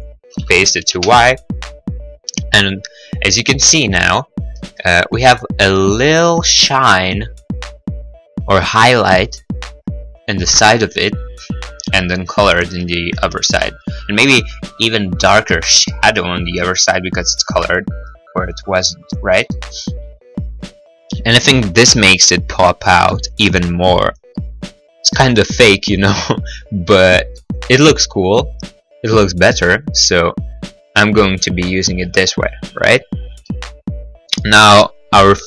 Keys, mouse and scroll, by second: 0.0 Return, 0.1 ctrl+v, 0.1 Return, 0.3 Return, 0.6 Return, 1.2 click, 3.7-4.1 scroll, 17.1-17.6 scroll, 19.9 middle click, 20.4 middle click, 20.4-21.1 scroll, 21.1-21.6 scroll, 23.1 scroll, 23.4 middle click, 23.6 middle click, 23.7 click, 25.3 click, 26.3 middle click, 26.6 middle click, 26.8-27.2 scroll, 27.5 scroll, 27.7 middle click, 28.0 middle click, 29.3 scroll, 30.1 middle click, 30.4 middle click, 30.4 scroll, 32.6 click, 33.9 middle click, 34.1 middle click, 34.1 scroll, 34.1 middle click, 34.8 middle click, 34.8 scroll.